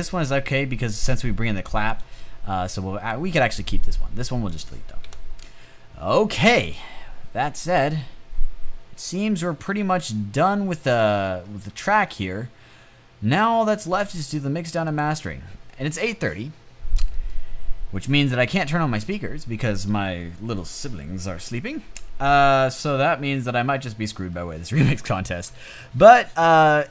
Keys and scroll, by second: 5.2 Delete.